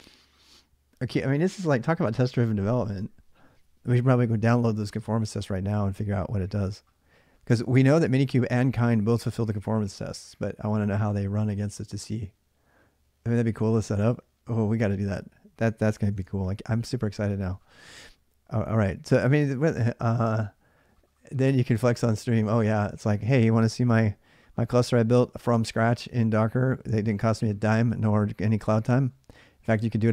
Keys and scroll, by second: 16.0 alt+Tab, 17.6 alt+Tab, 23.1 alt+Tab.